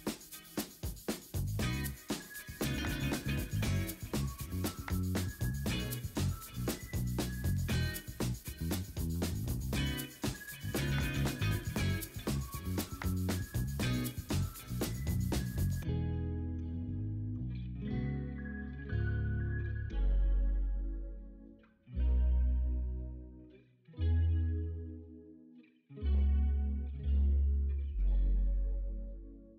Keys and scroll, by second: 0.3 ctrl+d, 0.6 b, 2.5 typing, 3.3 ctrl+d, 4.6-6.4 typing, 6.1 ctrl+d, 6.8 ctrl+d, 7.6 b, 7.9 ctrl+z, 14.5 v, 16.4 ctrl+e, 17.2-20.2 typing, 17.9 Return, 20.5 ctrl+d, 21.4-21.7 typing, 22.5 ctrl+z, 24.3 ctrl+d, 25.9 Return, 25.9 w, 26.1 ctrl+d, 27.6 v, 29.5 v.